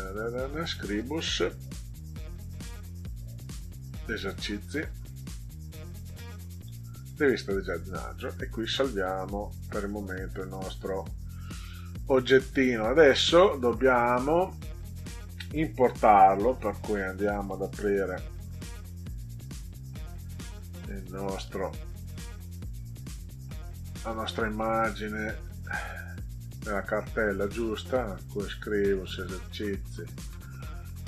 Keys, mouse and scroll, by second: 0.4 click, 0.7 click, 3.9 click, 4.1 click, 7.0 click, 9.7 click, 12.6 click, 13.8 click, 16.4 click, 17.8 click, 20.2 click, 21.4 click, 22.1 click, 24.4 click, 27.3 click, 27.6 click, 29.2 click, 29.4 click.